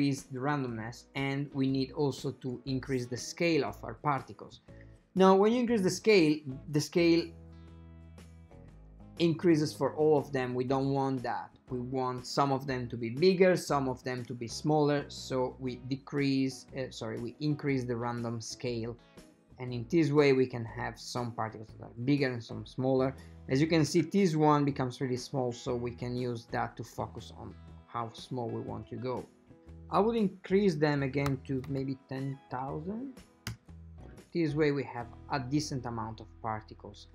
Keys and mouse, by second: 1.9-11.8 drag, 15.9-24.0 drag, 26.4-29.0 drag, 29.7 click, 31.9 KP_0, 33.0 KP_0.